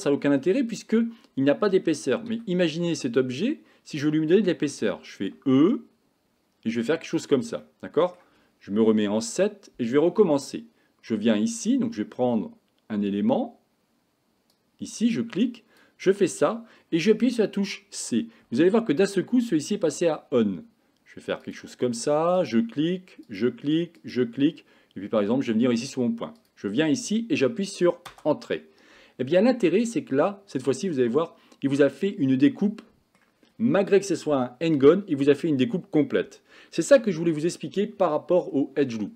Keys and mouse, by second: 2.8-4.0 middle drag, 5.3 e, 7.6 middle click, 8.9 KP_7, 14.6-28.2 drag, 29.4-33.2 middle drag.